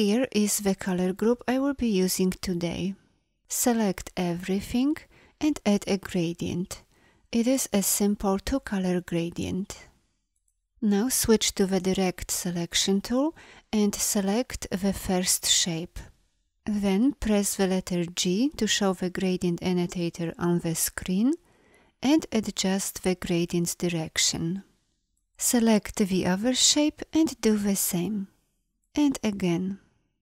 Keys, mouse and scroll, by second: 3.4 a, 11.6 a, 17.7 g.